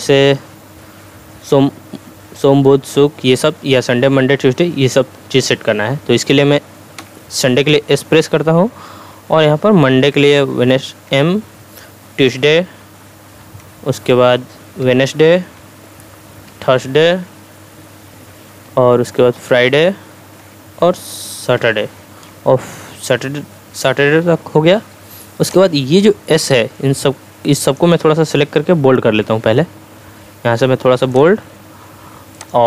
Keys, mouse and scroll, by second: 7.0 s, 8.7 Right, 10.0 m, 11.1 Right, 12.3 t, 13.5 Right, 14.8 w, 15.4 Right, 16.5 t, 17.1 Right, 19.5 f, 20.4 Right, 21.6 s, 22.9 Right, 25.5-28.0 drag.